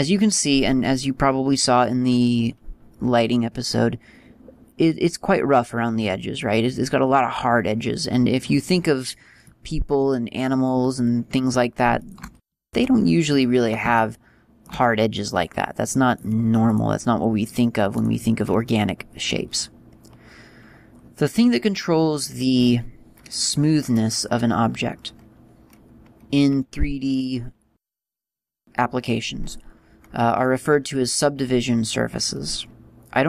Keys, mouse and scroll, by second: 0.9 middle click, 8.7-9.3 scroll down 2, 9.3 middle click, 11.8 shift+right click, 12.4 g, 13.4 click, 13.8 shift+middle click, 15.9 right click, 17.8 right click.